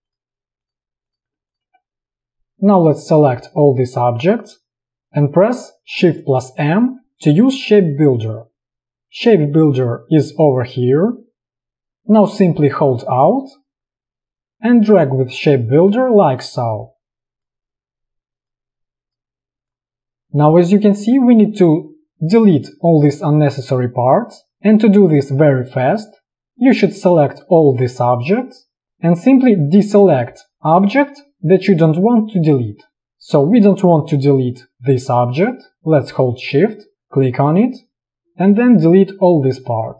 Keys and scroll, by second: 2.3 v, 6.7 shift+m, 26.4 space.